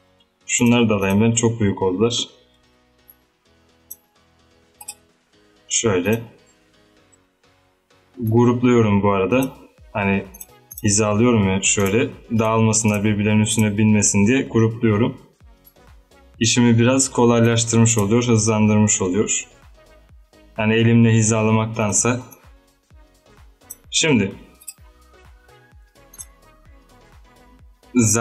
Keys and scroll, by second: 2.7 ctrl+g, 6.7 ctrl+g, 14.1 ctrl+g.